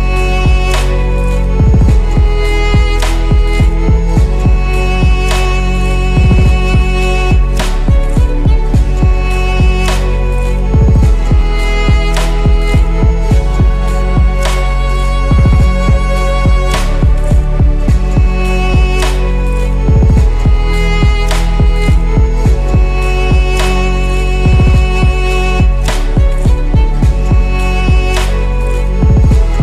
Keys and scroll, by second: 4.0 8, 4.3 F2, 5.2 ctrl+s, 13.5 0, 13.6 Return, 15.7 2, 15.8 Return, 15.8 5, 21.6 8, 26.0 8, 26.2 F2.